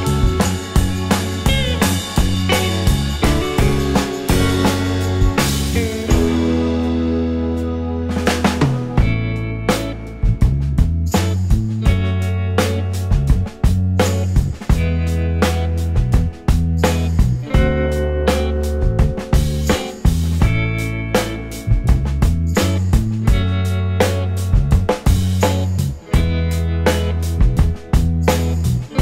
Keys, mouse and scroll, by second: 0.2 space, 1.3 alt+middle click, 1.8 alt+click, 4.2 scroll down 1, 4.6 alt+click, 6.3-7.2 scroll, 7.2-7.7 scroll down 1, 7.9 alt+middle click, 8.3 alt+click, 12.6 space, 13.4-13.8 scroll up 1, 13.8 space, 13.9 alt+middle click, 14.6 alt+scroll up 2, 16.9-17.6 alt+scroll up 4, 17.1 alt+middle click, 17.7 right click, 28.2 right click.